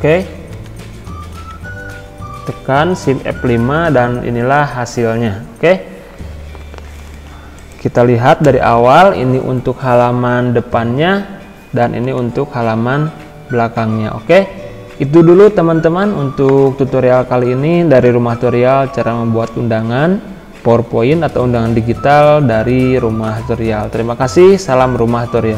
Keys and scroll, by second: 0.5 Down, 2.6 shift+F5, 6.6 Escape, 8.6 F5, 12.0 Right.